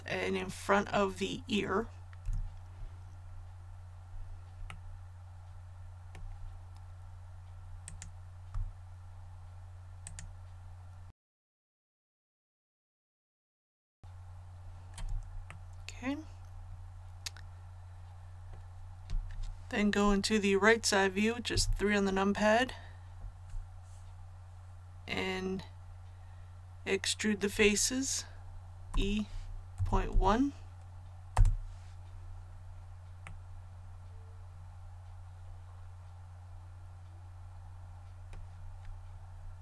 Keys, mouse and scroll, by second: 2.2 a, 3.4-3.9 scroll up 1, 4.6-6.4 middle drag, 7.8 right click, 10.0 shift+right click, 11.1 shift+right click, 11.6 shift+right click, 12.0 middle click, 12.3 shift+right click, 13.5 middle click, 15.4-19.0 middle drag, 21.4 KP_3, 28.8 e, 29.7 KP_Decimal, 30.0 KP_1, 31.3 Return, 33.2-35.3 middle drag, 35.3-35.9 scroll up 1, 35.9-37.3 scroll up 1, 39.0-39.6 scroll up 1.